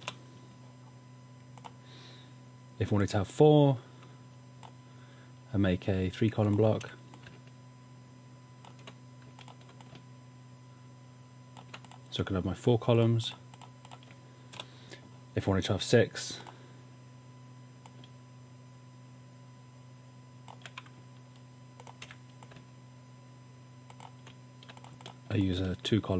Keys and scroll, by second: 0.1 BackSpace, 6.8 v, 14.5 BackSpace, 22.1 v.